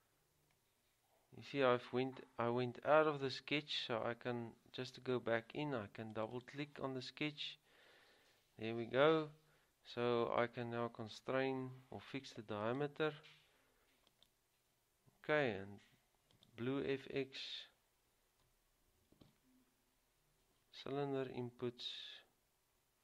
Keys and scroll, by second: 19.4 typing.